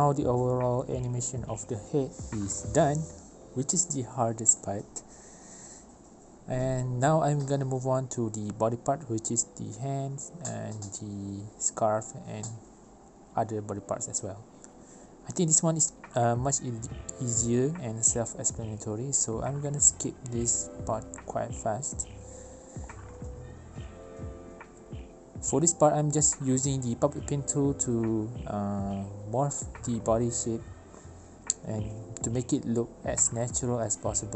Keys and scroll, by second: 5.9 space, 7.5 v, 10.1 ctrl+y.